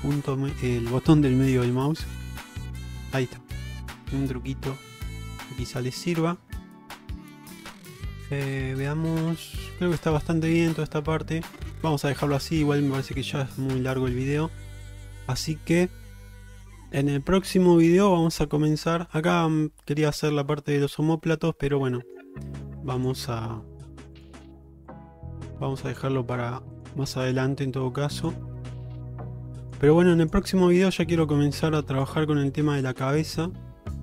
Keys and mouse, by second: 1.5 alt+middle click, 3.0 alt+middle click, 3.7 alt+middle click, 4.2 alt+middle click, 5.5 shift+middle click, 6.2 shift+middle click, 7.7 shift+middle click, 8.9 shift+middle click, 10.4 shift+middle click, 11.1 Tab, 11.5 alt+z, 12.3 shift+middle click, 12.7-13.6 middle drag, 14.0 shift+middle drag, 15.4-16.5 middle drag, 16.7 shift+middle drag, 17.5-18.0 middle drag, 18.2 shift+middle click, 18.7-19.2 middle drag, 20.9-22.2 middle drag, 22.5 middle click, 23.1 click, 23.2 Tab, 23.7 middle click, 24.2 click, 25.1 click, 26.8 click, 27.3 click, 28.9 click, 30.3 click, 30.6 middle click, 31.5 click, 33.5-34.0 drag.